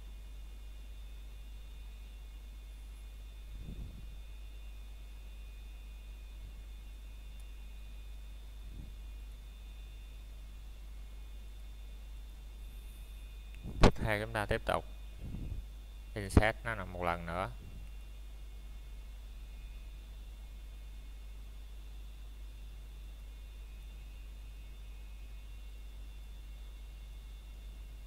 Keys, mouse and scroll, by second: 0.7 scroll up 1, 1.1 middle click, 1.7 shift+middle click, 2.9 click, 4.8 middle click, 6.3 click, 7.1 middle click, 9.6 shift+middle click, 10.3 scroll down 1, 10.6 shift+middle click, 11.6 scroll up 1, 12.4 middle click, 14.9 click, 15.5 middle click, 16.2-17.7 scroll down 1, 17.7 middle click, 18.3 scroll down 1, 18.8 middle click, 20.3 scroll up 1, 20.8 middle click, 21.4 shift+middle click, 22.0-23.1 scroll down 1, 23.1 click, 25.6 click, 26.9 middle click, 27.4 scroll up 1, 27.8 middle click.